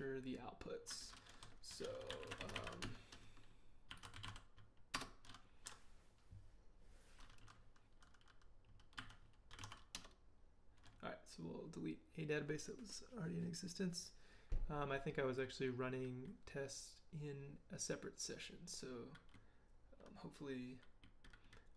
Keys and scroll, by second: 1.5-4.7 typing, 4.9 Return, 9.0-10.1 typing.